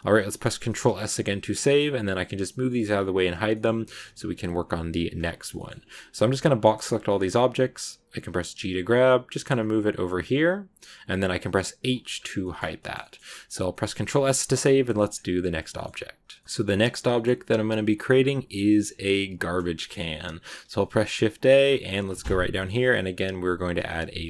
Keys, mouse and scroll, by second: 0.5 ctrl+s, 0.8-1.3 scroll down 1, 1.3 middle click, 1.8 scroll down 1, 3.4-6.1 middle drag, 6.1 b, 12.0 scroll up 2, 12.3 shift+middle click, 13.1-13.6 scroll up 2, 13.6 middle click, 13.9 ctrl+s, 14.8-15.8 shift+middle drag, 15.8 z, 16.3-17.4 shift+middle drag, 17.4-19.6 scroll up 1, 19.6 shift+middle click, 20.0-20.6 scroll up 1, 20.6 shift+a.